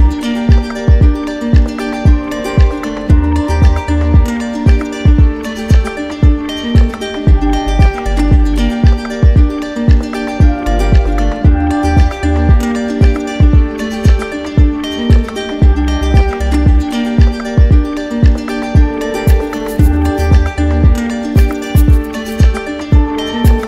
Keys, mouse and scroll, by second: 0.8 shift+right click, 2.1 alt+right click, 3.3 right click, 4.1 right click, 5.9 z, 8.2 click, 10.7 alt+click, 11.1 ctrl+z, 12.7 alt+click, 14.1 right click, 14.6 shift+right click, 15.0 ctrl+z, 15.8 right click, 16.4 z, 16.8 right click, 17.3-18.4 drag, 18.4 right click, 19.1 click, 19.9 right click.